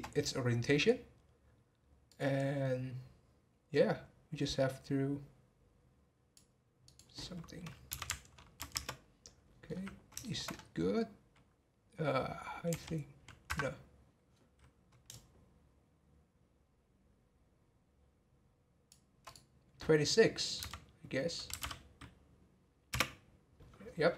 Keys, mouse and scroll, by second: 2.1-5.1 drag, 6.8-9.7 drag, 9.7-10.2 scroll up 2, 10.2 shift+middle click, 10.5 scroll up 1, 12.7 r, 15.1-18.2 shift+drag, 19.2-22.4 drag, 24.0-24.1 scroll down 3.